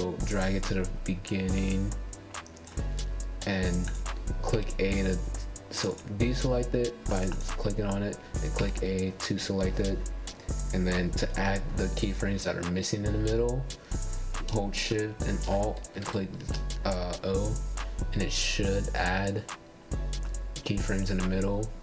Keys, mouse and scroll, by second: 1.4 space, 2.9-4.0 drag, 4.2 a, 5.8-8.5 drag, 10.9 alt+shift+o, 17.6-21.8 drag.